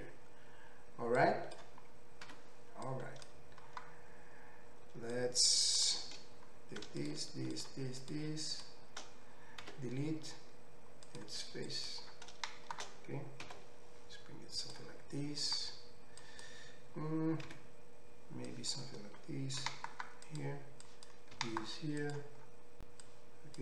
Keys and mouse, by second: 1.3-7.1 drag, 2.3 3, 7.1 shift+middle click, 7.6 shift+click, 7.6 shift+middle click, 8.0 shift+click, 8.1 shift+middle click, 8.5 shift+click, 8.6-11.7 shift+middle drag, 9.6 x, 11.7-14.8 drag, 13.5 s, 14.8-16.3 middle drag, 16.3-20.4 drag, 17.6 1, 19.6 g, 20.4 middle click, 20.9-22.1 drag, 21.3 g, 22.1 middle click, 23.1-23.6 drag.